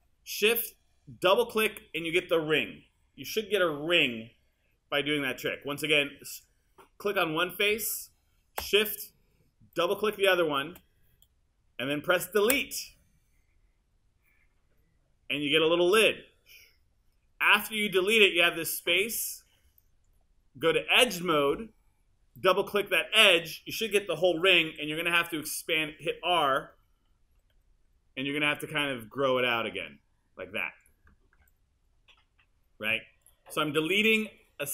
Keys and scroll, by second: 12.6 BackSpace, 24.7 t, 27.3 e, 27.8 r.